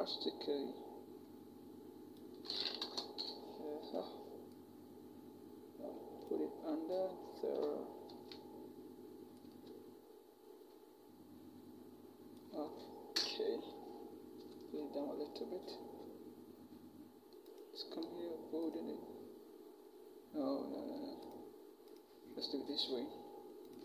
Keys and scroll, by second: 2.6 alt+shift+Return, 3.6 v, 7.9 ctrl+t, 13.0 alt+shift+Return, 14.2 Down, 14.6 Down.